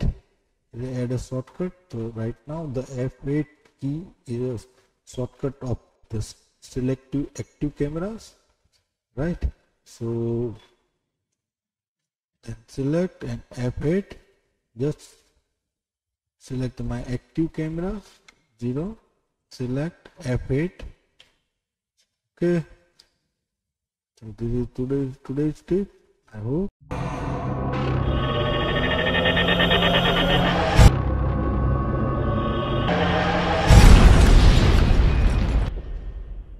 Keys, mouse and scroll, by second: 10.7-12.6 scroll down 1, 12.6 click, 13.8 F8, 18.2 KP_0, 19.4 click, 21.2 F8.